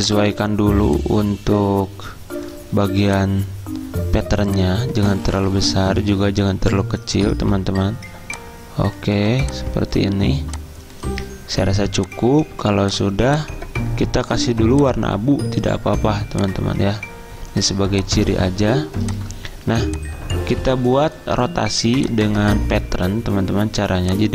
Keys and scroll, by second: 3.0 z.